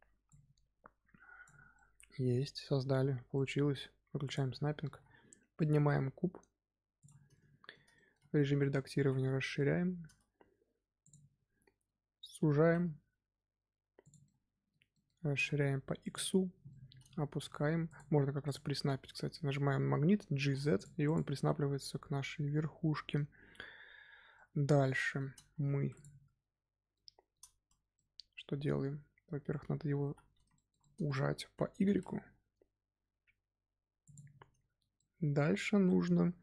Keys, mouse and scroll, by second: 1.7-4.2 middle drag, 4.2 click, 4.5 scroll down 1, 4.8 g, 7.3 middle click, 8.2 scroll up 2, 8.4 Tab, 8.5 middle click, 8.9 s, 12.5 s, 14.2-15.2 middle drag, 15.2 s, 16.5 Tab, 16.6-17.3 middle drag, 17.3 g, 18.4 click, 19.8 scroll up 2, 20.3 g, 21.0 click, 21.2-25.5 middle drag, 25.5 Tab, 25.7 3, 25.9 click, 26.9-30.0 shift+middle drag, 30.0 l, 30.5-31.8 shift+middle drag, 31.8 s, 34.9-36.4 middle drag.